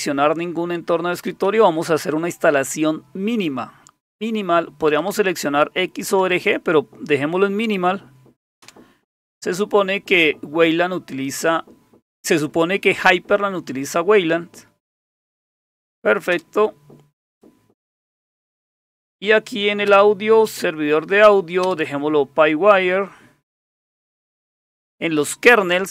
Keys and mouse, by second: 1.3 Down, 4.9 Down, 5.1 Down, 6.2 Up, 6.4 Up, 8.6 Return, 15.5 Down, 16.3 Return, 19.9 Return, 21.6 Return.